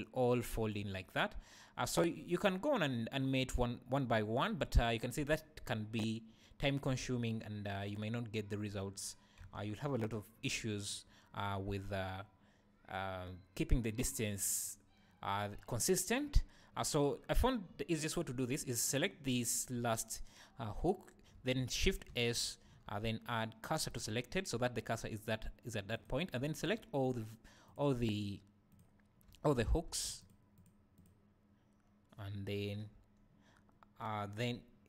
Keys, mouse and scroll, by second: 7.0 x, 18.9 click, 22.1 shift+s, 22.8 shift+s, 25.9 click, 26.6 shift+click, 27.0 shift+click, 27.7 shift+click, 28.7 shift+click, 29.9 ctrl+z, 30.2 shift+click, 30.5 shift+click, 30.9 shift+click.